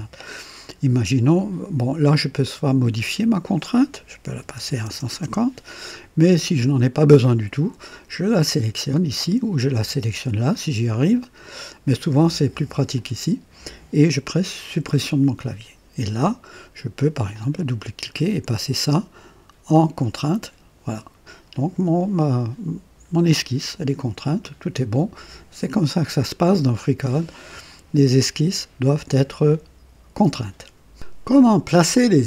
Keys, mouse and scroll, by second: 2.3 click, 4.2 KP_1, 4.5 KP_5, 4.8 KP_0, 5.1 Return, 8.8 click, 9.5 click, 10.4 click, 12.2 click, 12.9 click, 14.6 Delete, 17.2 click, 18.7 click, 20.0 click.